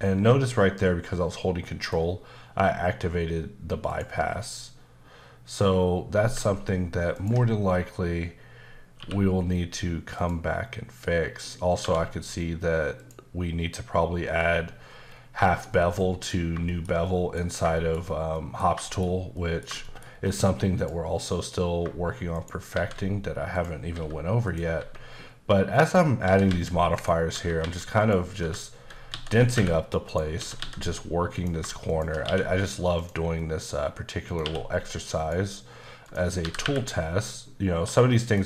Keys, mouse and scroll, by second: 2.6 q, 3.9 click, 7.2 ctrl+click, 9.0 q, 10.1 click, 11.8 1, 13.0 click, 15.1 scroll down 2, 15.4 shift+middle click, 15.7-16.0 scroll down 2, 16.0 middle click, 16.4 scroll up 1, 16.7 shift+middle click, 17.7 middle click, 18.1 scroll down 1, 18.3 middle click, 18.8 middle click, 19.8 middle click, 20.2-20.8 scroll up 2, 20.8 click, 22.3 right click, 22.7 shift+a, 23.5 click, 23.9 s, 24.4 click, 24.8 s, 25.7 click, 26.2-30.6 typing, 26.9 click, 28.0 click, 30.1 right click, 31.3 click, 31.9 shift+click, 32.2 q, 33.0 click, 33.4 middle click, 33.7-34.3 scroll up 2, 34.3 click, 34.4 q, 35.2 click, 35.7-36.0 scroll down 1, 36.0 click, 36.4 typing, 38.2 click.